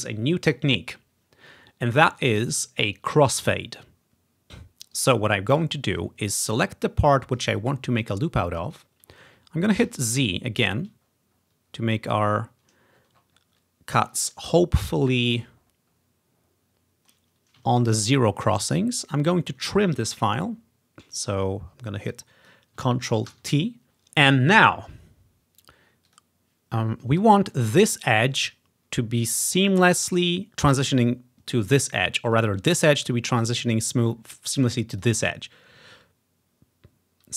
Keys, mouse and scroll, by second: 5.0 click, 6.0-7.4 drag, 9.9 z, 10.6-12.2 ctrl+scroll up 5, 13.0-14.5 scroll down 8, 14.5 scroll up 1, 15.2-16.7 scroll up 2, 16.7 ctrl+scroll up 1, 17.8-19.3 ctrl+scroll down 2, 19.3 scroll up 1, 20.0 scroll up 1, 20.6 scroll up 1, 22.2-23.5 drag, 23.4 ctrl+t, 26.1 click, 27.7 click, 31.8 click, 32.3 click, 32.6 click, 35.0-37.1 drag.